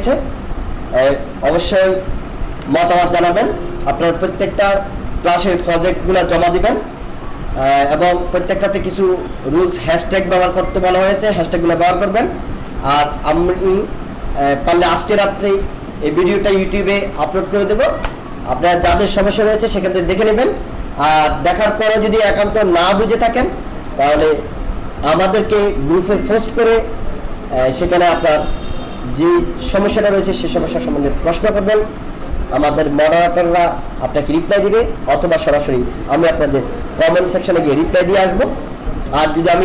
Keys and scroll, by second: 1.6 ctrl+-, 2.7 alt+space, 6.1 ctrl+-.